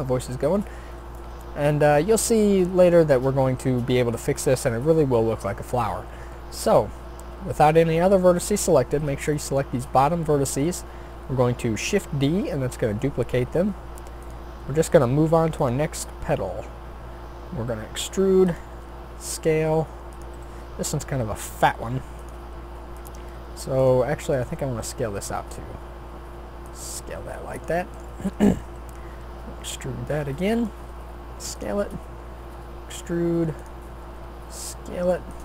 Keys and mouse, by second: 0.7-6.6 middle drag, 6.6 a, 9.0 b, 12.2 shift+d, 14.6 r, 15.9 e, 18.7 s, 20.3 g, 22.5 s, 23.8 click, 24.8 s, 26.3-27.6 drag, 28.7 e, 30.0-31.6 drag, 30.7 s, 32.0 e, 34.0 s.